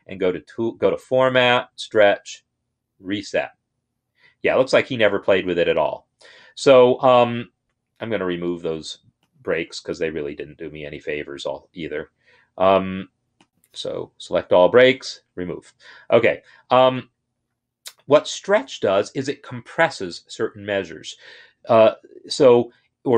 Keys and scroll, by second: 14.8 BackSpace.